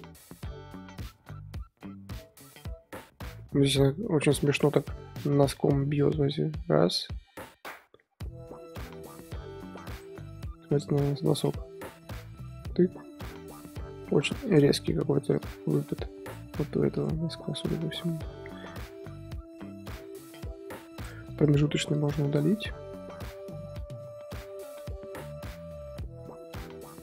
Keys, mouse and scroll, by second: 21.3 click, 21.8 x, 22.3-27.0 drag.